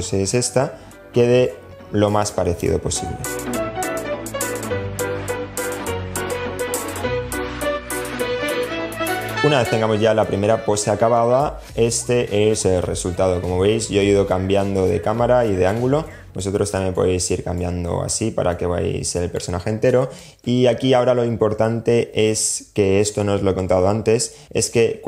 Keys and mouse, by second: 0.7-1.9 drag, 3.6 click, 4.0 click, 4.6 click, 5.4 click, 5.9 click, 6.1 click, 6.7 click, 6.9 super+z, 6.9 click, 7.2 click, 7.3 click, 7.8 click, 7.9 super+z, 7.9 super+z, 9.1-10.3 middle drag, 13.7-14.9 middle drag, 15.3-15.6 alt+middle drag, 15.9 alt+middle click, 16.4-16.8 alt+middle drag, 17.0 alt+middle drag, 17.7-18.7 middle drag, 19.0 middle click.